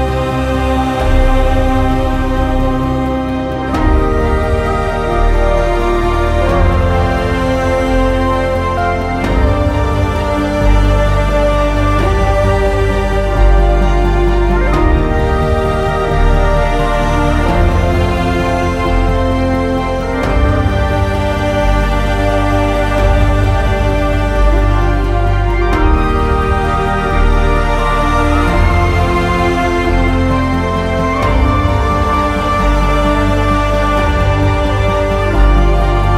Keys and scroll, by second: 6.3 ctrl+z.